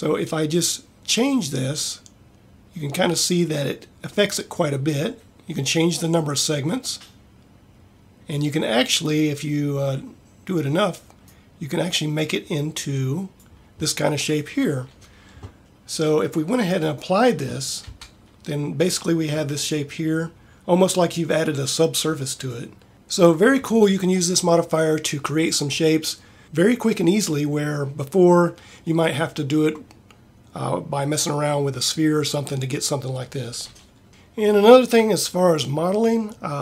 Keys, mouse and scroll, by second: 1.0 middle click, 6.0-7.4 middle drag, 14.0-16.7 middle drag, 18.0 Tab.